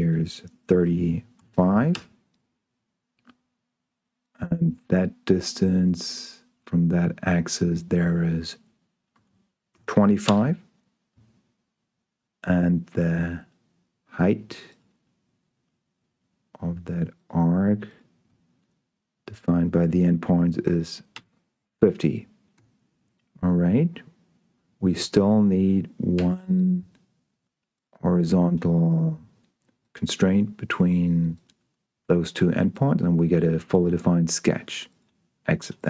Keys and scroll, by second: 1.1 3, 1.6 5, 2.2 Return, 3.4 Return, 3.9 Return, 4.3 Tab, 9.4 2, 10.0 5, 10.5 Return, 12.3 Return, 12.6 Tab, 20.5 5, 20.9 0, 21.5 Return, 22.8 Escape, 23.5 Tab, 26.4 s, 33.5 Escape.